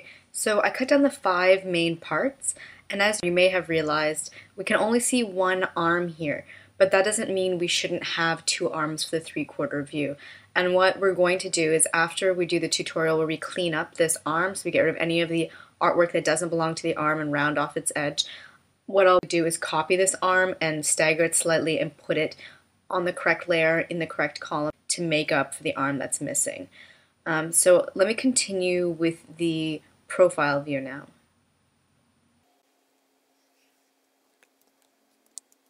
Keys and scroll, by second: 35.2 super+F9.